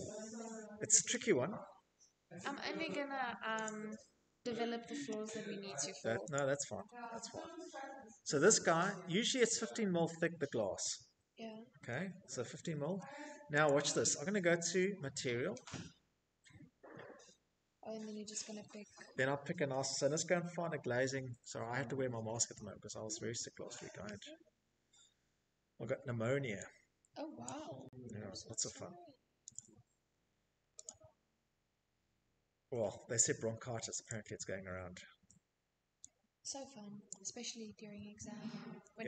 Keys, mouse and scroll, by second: 0.9 click, 3.6 click, 5.4-6.3 typing, 10.9 click, 20.3-21.8 scroll, 21.8-24.7 scroll, 24.7 click, 26.8 click, 27.9 click, 28.1 click, 30.0-30.6 scroll, 30.6 middle click, 31.3 click, 34.3 click, 34.5-35.1 scroll, 38.2-39.0 scroll.